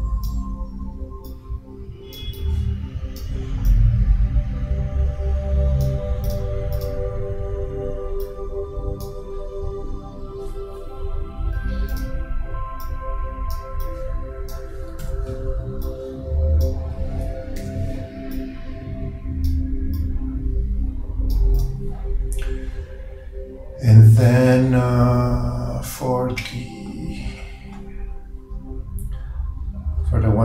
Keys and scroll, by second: 15.1 super+z, 17.7 super+g.